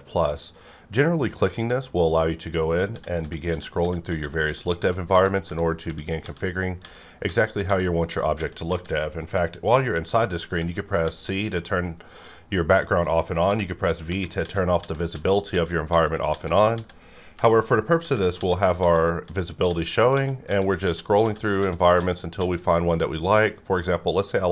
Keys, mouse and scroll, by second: 1.2 click, 2.8-8.7 typing, 10.4-11.0 typing, 13.5-19.6 typing, 21.6-22.4 typing.